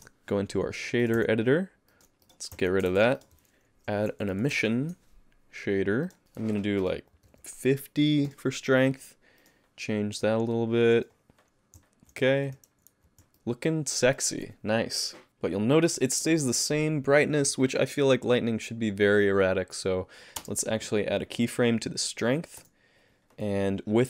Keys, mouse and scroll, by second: 1.0 click, 1.9 middle click, 2.2 click, 2.5 x, 2.9 shift+a, 6.2 click, 9.4 click, 11.8 z, 12.7 alt+a, 13.4 middle click, 15.3 click, 15.3 space, 20.4 space, 21.4 click, 22.6 i.